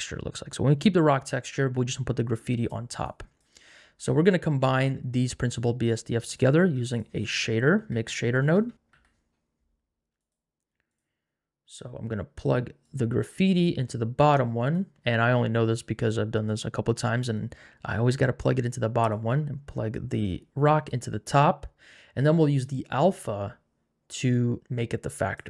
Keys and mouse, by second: 2.3 click, 3.0 click, 4.3 click, 6.2 click, 6.5 shift+a, 12.8 click, 19.1 click, 22.6 click.